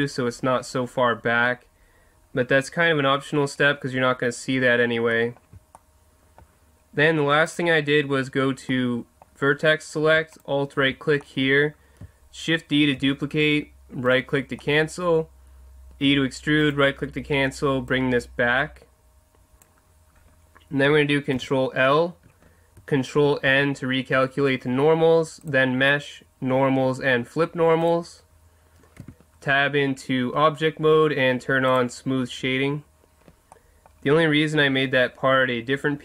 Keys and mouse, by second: 5.1-7.5 middle drag, 7.5-8.7 drag, 8.7 middle click, 8.9 click, 9.0 middle click, 9.1 click, 10.4 right click, 11.2-13.0 middle drag, 13.0 shift+d, 14.2 click, 16.1 e, 19.3 click, 19.5 click, 21.3 ctrl+l, 23.4 ctrl+n, 29.0 Tab, 31.7-33.5 drag, 33.5-36.0 middle drag.